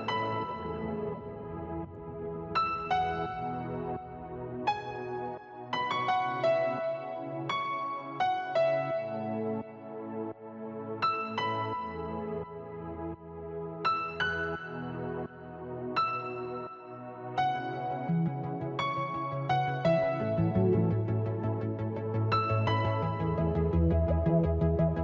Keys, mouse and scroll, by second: 2.1 click, 4.4 click, 4.4 KP_0, 6.4 KP_0, 6.5 click, 8.1 click, 8.1 n, 9.2 click, 10.0 click, 10.8 click, 12.0 click, 12.8 middle click, 19.1 click, 20.1 middle click, 22.6 middle click, 24.1 shift+middle click.